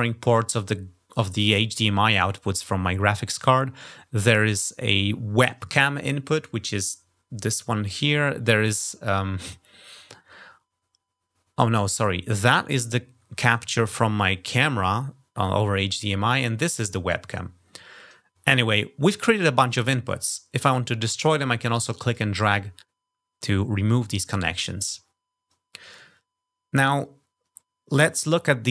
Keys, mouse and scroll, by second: 9.8 scroll down 2, 17.2 scroll down 2, 20.0-21.9 drag.